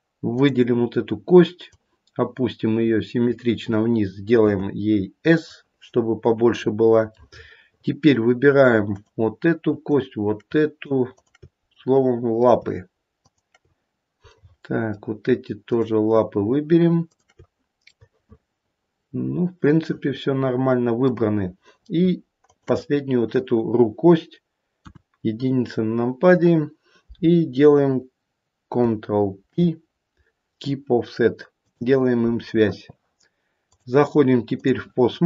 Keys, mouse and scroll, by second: 0.3 click, 1.7 click, 4.4 s, 5.9-6.5 scroll up 3, 7.2 middle click, 7.3 middle click, 7.7 middle click, 8.8 click, 9.9 shift+click, 11.1 click, 11.7 middle click, 13.2 shift+click, 14.3 middle click, 15.7 shift+click, 17.1 shift+click, 17.9 middle click, 21.2-22.0 scroll down 1, 22.0-22.5 scroll down 2, 22.5 shift+click, 24.7 KP_1, 25.4-25.8 scroll up 1, 29.4 ctrl+p, 33.6 click.